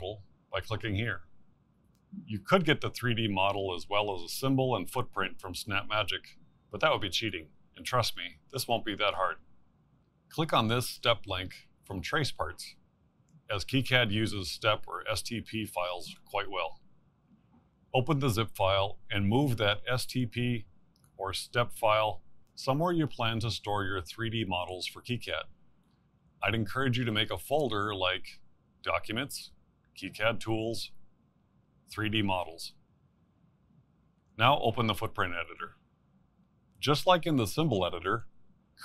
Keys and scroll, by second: 31.3-33.0 typing, 33.3 Return.